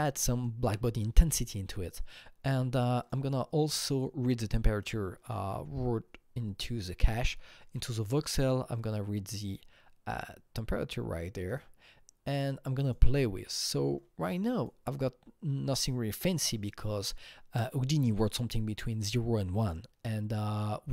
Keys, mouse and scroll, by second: 0.2 KP_1, 0.7 Return, 2.2 click, 3.9-4.8 drag, 7.1-10.6 drag, 11.4 click, 12.8 click, 13.2-14.5 scroll down 6, 14.5 click, 16.9 click.